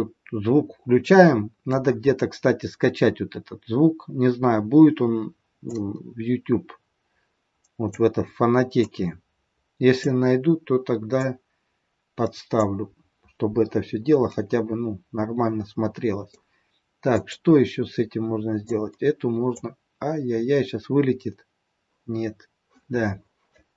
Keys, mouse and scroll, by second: 2.8-3.3 scroll up 6, 5.5 click, 8.8 click, 11.1 click, 13.9 scroll down 3, 14.3 middle click, 17.1 click, 18.5 click.